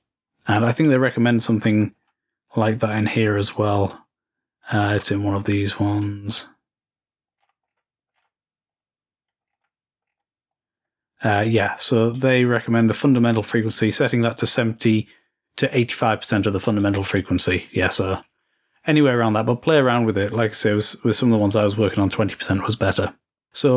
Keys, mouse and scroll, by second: 1.8-4.0 scroll down 3, 4.2-5.0 scroll up 2, 6.5 click, 7.1 click, 7.5-10.8 scroll down 6, 10.8-11.5 scroll up 2, 12.1 click, 12.7-14.2 drag, 14.4-17.7 drag, 19.9 click, 21.5-22.6 drag.